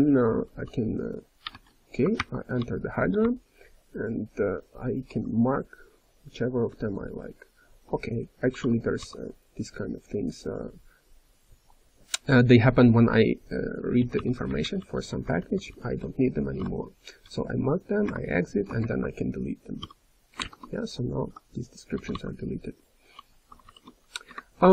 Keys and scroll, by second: 1.5 BackSpace, 2.1 ctrl+o, 2.5-5.1 typing, 6.7 j, 8.4 k, 13.9 m, 17.8-18.5 typing.